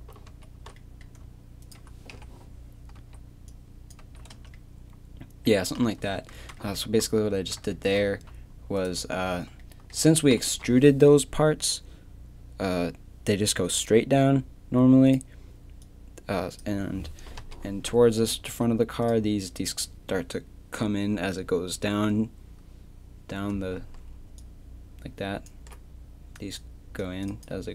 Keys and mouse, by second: 0.3 ctrl+z, 2.1 KP_1, 3.0 z, 4.0 z, 4.3 Tab, 5.8 KP_3, 6.0 Tab, 6.4 z, 7.3 z, 8.1 a, 9.3 z, 10.3 KP_3, 15.1 click, 17.4 KP_1, 18.4 z, 23.8-24.4 d, 24.4-27.4 drag.